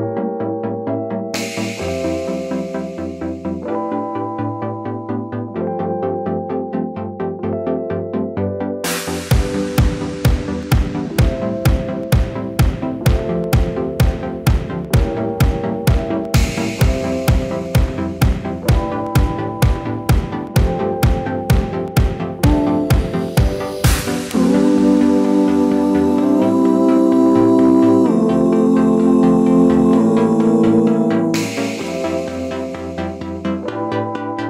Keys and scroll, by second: 2.9 super+z, 4.2 BackSpace, 5.1 d, 6.8 d, 7.2 l, 8.5-9.2 typing, 15.0 super+c, 15.2 super+v, 17.1 super+c, 17.2 super+v, 30.4 super+d.